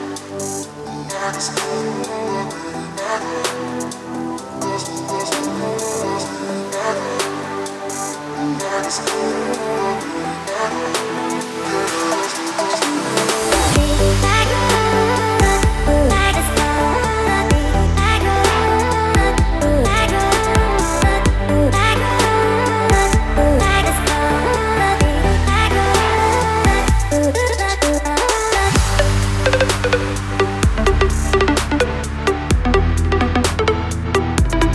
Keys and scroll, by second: 3.9 ctrl+t.